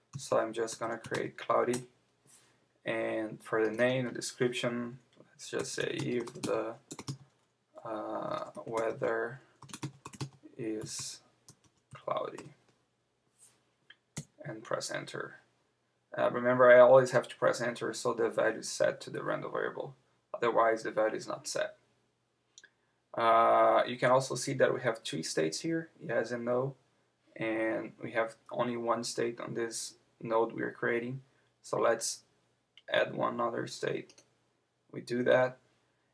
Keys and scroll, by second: 1.7 Return, 14.2 Return.